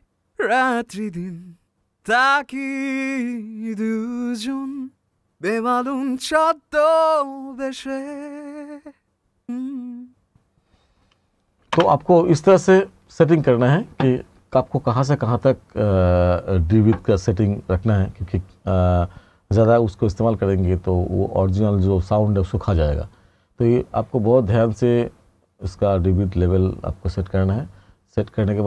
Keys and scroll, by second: 11.7 space.